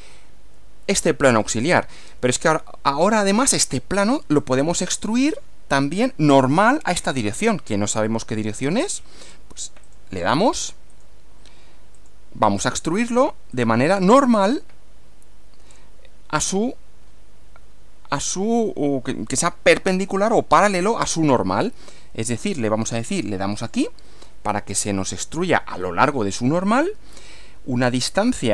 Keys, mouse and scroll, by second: 1.4 scroll down 1, 4.1 scroll up 2, 5.0 scroll up 1, 9.8 click, 11.0 click, 12.0 click, 13.5 click, 23.6 click.